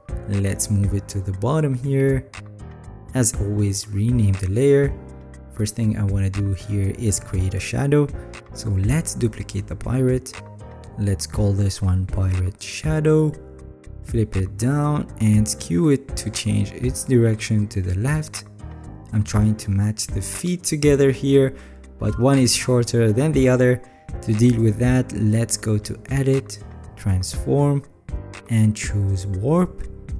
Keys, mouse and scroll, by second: 10.3-12.0 alt+drag, 14.0 ctrl+t, 17.8 ctrl+click, 18.4 ctrl+click, 20.7 ctrl+click, 21.9 alt+scroll, 22.8-23.2 alt+scroll, 23.2 alt+scroll up 8.